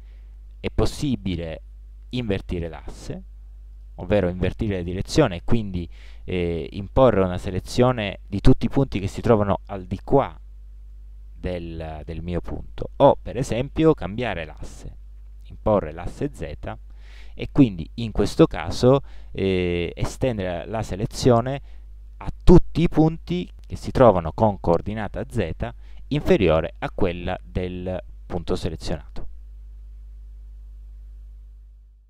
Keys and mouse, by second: 2.7-13.1 drag.